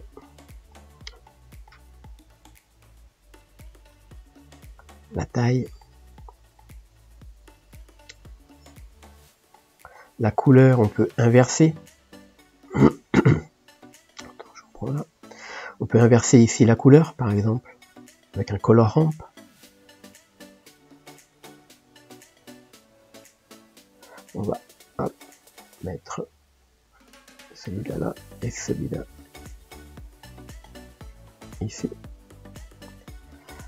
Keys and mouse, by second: 26.8-33.6 drag.